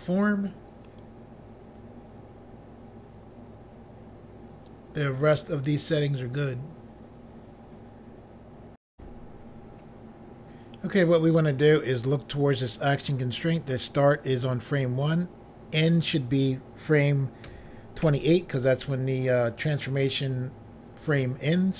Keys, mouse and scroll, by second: 1.0 click, 1.1 click, 8.9 Pause, 15.9 click, 16.0 click, 17.4 2, 18.0 8, 21.4 click.